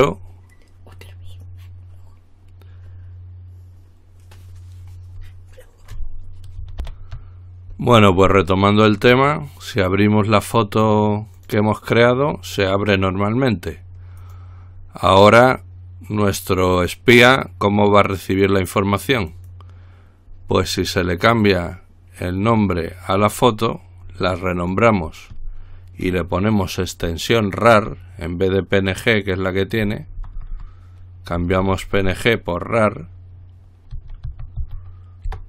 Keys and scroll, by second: 7.1 ctrl+r, 27.7 typing, 30.0-30.4 typing, 30.6 Right, 30.7 Right, 31.8 typing, 33.9-35.4 typing.